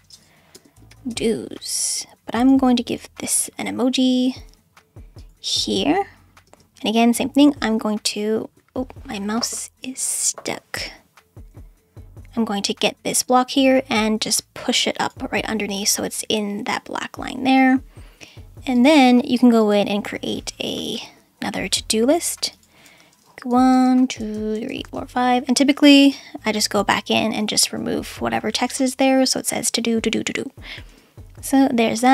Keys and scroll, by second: 0.0-1.6 typing, 6.4 space, 20.9 /, 23.5 1, 23.7 Return, 24.0 1, 24.2 Return, 24.3 1, 24.5 Return, 24.9 1, 26.1 BackSpace, 27.0 Up, 27.4 Right, 27.7 BackSpace, 28.0 Up, 28.4 Right, 28.6 BackSpace, 29.1 Up, 29.5 Right, 29.8 BackSpace, 30.1 Up, 30.6 Right, 30.9 BackSpace.